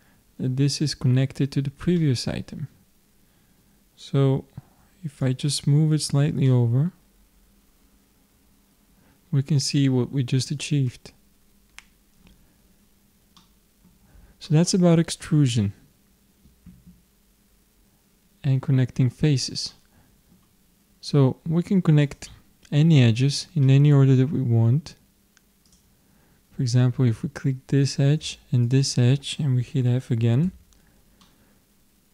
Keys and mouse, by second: 2.0-5.2 middle drag, 5.2-7.1 drag, 6.5 middle click, 7.1-8.2 middle drag, 12.9 click, 13.4-18.2 middle drag, 19.7-21.4 middle drag, 22.1-23.7 drag, 23.7 middle click, 25.7-26.8 middle drag, 26.8 click, 28.7-30.4 drag, 30.4 f, 31.2-32.1 middle drag.